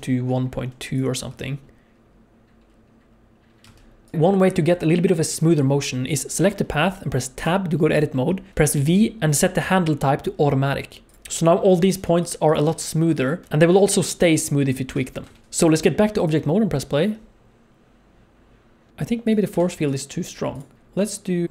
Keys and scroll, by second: 1.2 space, 3.6 space, 4.1 alt+a, 7.4 Tab, 8.7 v, 12.6 g, 13.4 g, 13.4 Tab, 13.4 g, 13.9 g, 15.2 Tab, 15.4 alt+a, 17.0 space, 18.9 space, 19.6 alt+a.